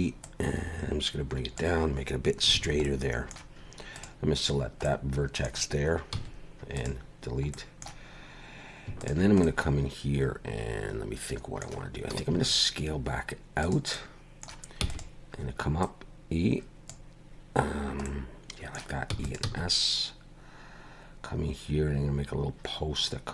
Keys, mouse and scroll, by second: 0.2 click, 2.5 alt+a, 2.8 middle click, 3.9 click, 4.8 middle click, 6.1 x, 7.5 middle click, 9.0 alt+shift+click, 9.4 middle click, 12.3 s, 13.9 middle click, 14.8 e, 15.8 click, 18.0 middle click, 19.1 e, 19.5 s.